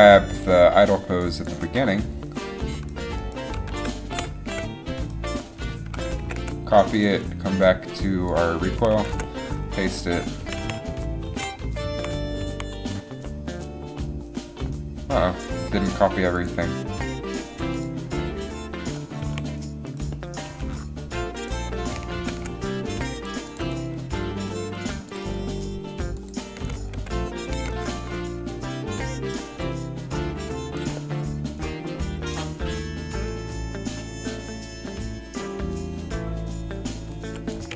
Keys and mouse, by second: 3.9 shift+d, 6.3 ctrl+c, 9.1 ctrl+v, 10.6-12.6 typing, 20.7 a, 22.3 ctrl+c, 23.0 a, 25.3 ctrl+c, 27.1 ctrl+v, 33.4-34.7 drag.